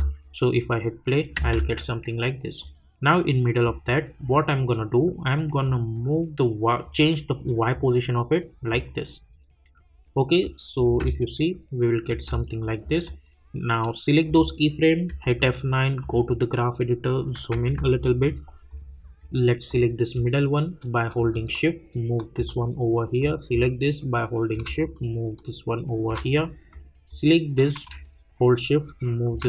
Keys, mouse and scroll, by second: 1.9 space, 2.6-4.5 drag, 4.5-5.6 scroll down 1, 5.6-10.8 drag, 10.8 space, 13.0-15.1 drag, 15.1 F9, 16.0 click, 17.5 =, 18.7-23.2 drag, 23.2-26.7 drag, 26.7-29.4 drag.